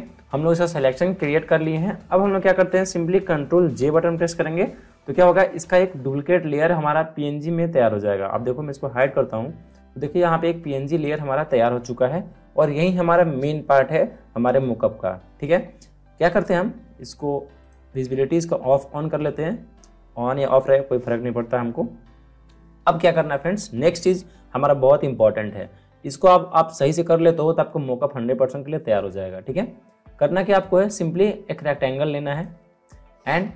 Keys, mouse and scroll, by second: 0.0-0.5 scroll up 2, 0.8 scroll up 1, 1.0-2.1 scroll down 4, 2.3-3.2 alt+scroll down 2, 3.7 ctrl+j, 8.9 click, 17.5 click, 32.3 click.